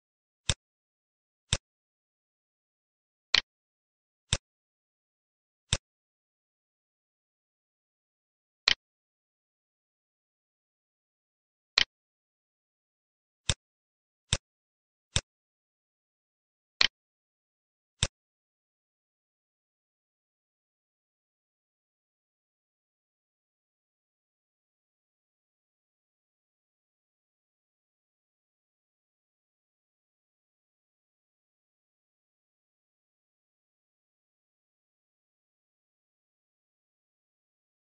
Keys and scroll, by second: 19.4 F4, 21.8 F9.